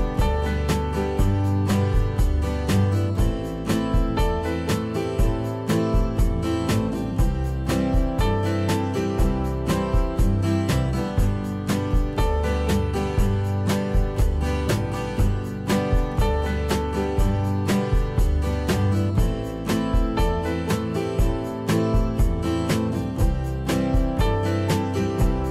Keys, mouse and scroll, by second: 15.1 F2, 23.3 f.